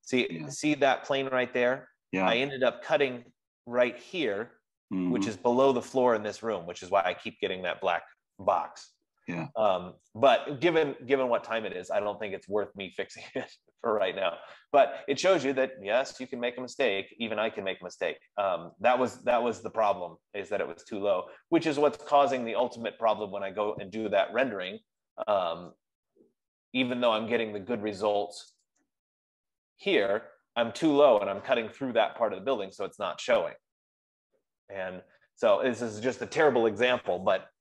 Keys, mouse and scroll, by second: 2.4-3.4 scroll, 3.6-4.0 scroll, 6.0 F15, 7.1 scroll, 9.5 scroll, 10.0-10.3 scroll, 16.3-17.3 scroll, 17.3 scroll, 18.2 scroll, 19.9-20.4 scroll, 29.1-33.9 drag.